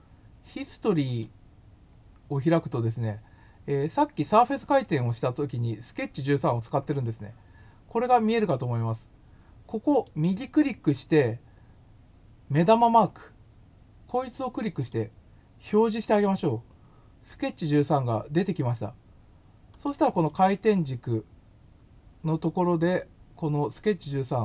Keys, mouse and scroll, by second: 1.0 click, 14.8 click, 19.7 click, 20.2 click, 23.8 click.